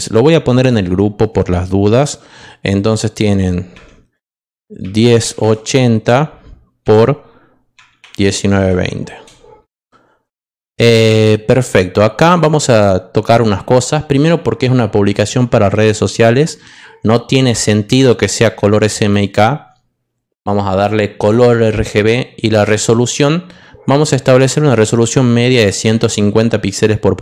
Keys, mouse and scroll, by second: 0.0 click, 0.5 click, 3.8-9.1 typing, 12.6 click, 18.9 click, 21.1 click, 22.6 click, 25.6 click.